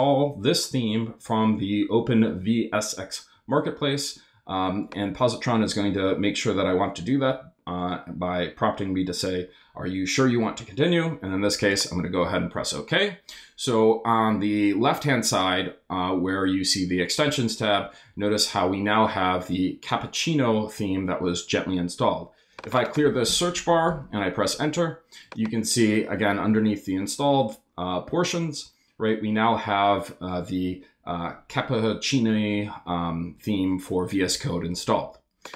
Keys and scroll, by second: 23.5 BackSpace, 23.9 Return.